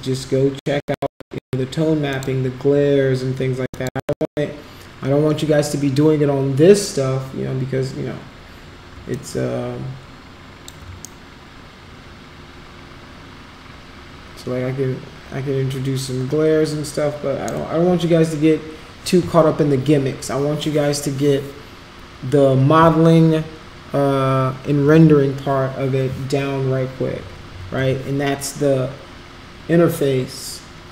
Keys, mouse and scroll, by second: 3.7 click, 9.1-10.6 alt+drag, 11.0-17.5 shift+right drag.